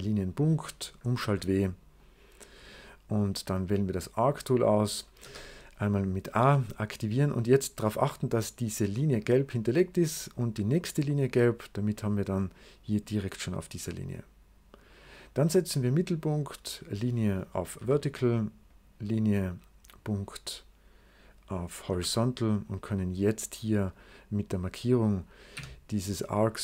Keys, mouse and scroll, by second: 1.9 right click, 3.1 scroll up 2, 3.6 right click, 5.1 a, 9.2 click, 11.7 click, 12.2-14.9 drag, 15.7 click, 16.5 click, 17.7 v, 18.6 click, 19.8 click, 21.8 h, 23.0 click, 24.0 click, 24.8 click, 25.3 click, 25.4 d.